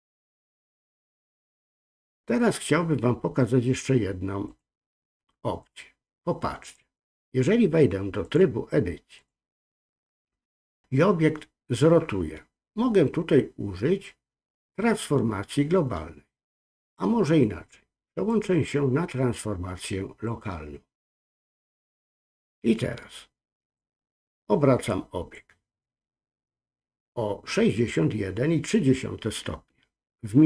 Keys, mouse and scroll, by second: 4.4-5.9 drag, 6.6 click, 8.2-9.2 drag, 18.3-21.4 drag, 23.7-25.3 drag.